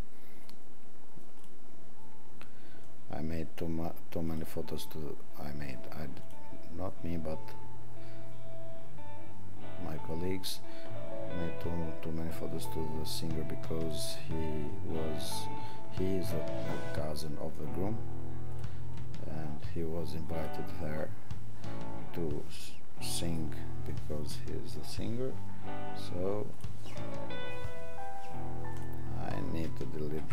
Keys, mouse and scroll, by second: 1.4 click, 13.8 click.